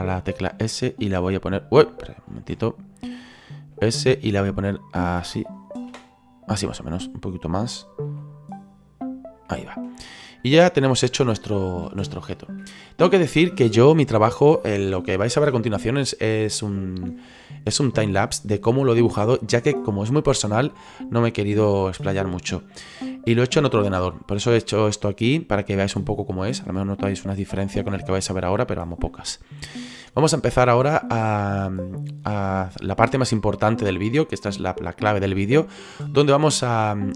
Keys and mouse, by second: 0.5 s, 1.6 click, 2.3 ctrl+z, 2.5 middle click, 3.7 s, 5.5 click, 5.9 KP_3, 8.0 s, 9.4 click, 9.7 middle click, 10.7 middle click, 12.2 middle click, 13.1 shift+middle click, 24.1 middle click, 29.2 shift+middle click, 31.4 shift+middle click.